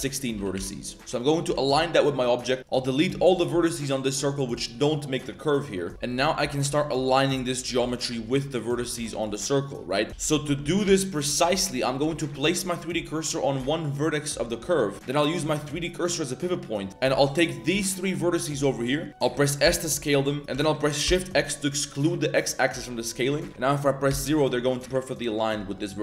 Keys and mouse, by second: 0.3 r, 1.0 shift+s, 2.6 ctrl+shift+z, 2.6 shift+click, 3.3 z, 6.1-10.1 typing, 10.1 ctrl+z, 10.2 ctrl+z, 10.3 ctrl+z, 10.6 ctrl+z, 11.1 ctrl+z, 11.2 a, 11.4 a, 11.7 click, 12.0 shift+s, 15.3-16.1 drag, 16.9 z, 17.1 shift+middle click, 17.7 z, 18.4 middle click, 18.8 middle click, 19.6 s.